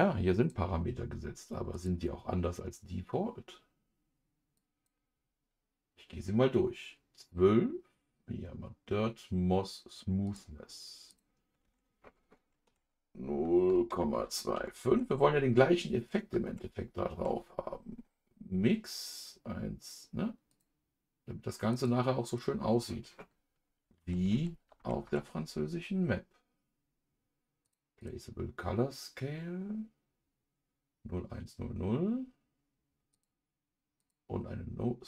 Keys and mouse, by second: 10.2-20.5 drag, 21.7 click, 22.2-27.6 drag, 28.0-33.2 drag, 34.0 click.